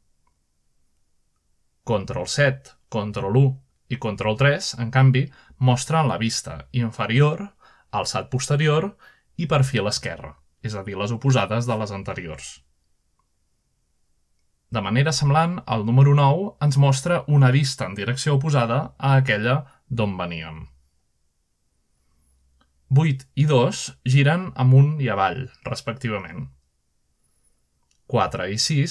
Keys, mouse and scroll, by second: 0.0 7, 1.0 1, 1.9 3, 5.9 ctrl+1, 16.2-16.6 scroll up 2, 16.6 scroll down 2, 19.5 middle click, 20.3 9, 22.4-28.9 typing.